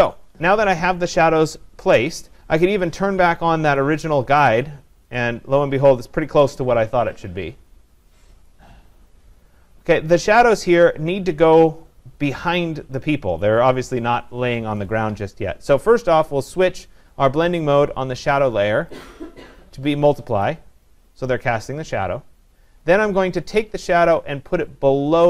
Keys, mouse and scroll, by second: 3.8 click, 5.2 click, 6.1 click, 8.5 click, 19.1-20.1 drag.